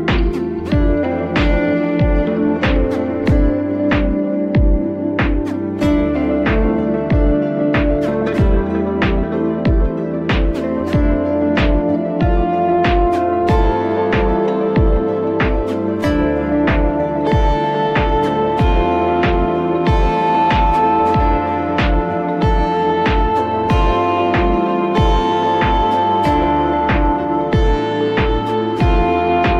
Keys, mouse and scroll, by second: 0.6 s, 2.9 g, 7.0-7.4 middle drag, 7.4 scroll down 1, 7.7 middle click, 8.0-8.3 scroll up 1, 8.3-10.8 middle drag, 10.8 click, 11.1 Tab, 11.5 scroll up 1, 11.7 middle click, 12.0 scroll down 2, 12.3-12.7 scroll up 2, 12.7 click, 13.1 Tab, 13.6 click, 14.0 shift+click, 14.2 shift+click, 15.2 click, 15.8 a, 16.4 s, 19.1 g, 26.6 click, 26.9 Tab, 28.1-28.5 scroll up 1, 28.5-29.5 scroll down 2.